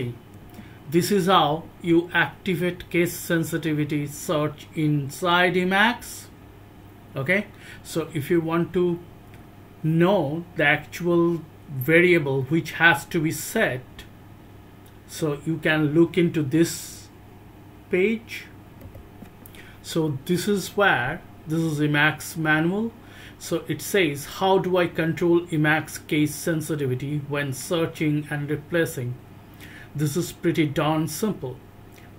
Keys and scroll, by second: 0.0-0.4 typing, 18.8 alt+-.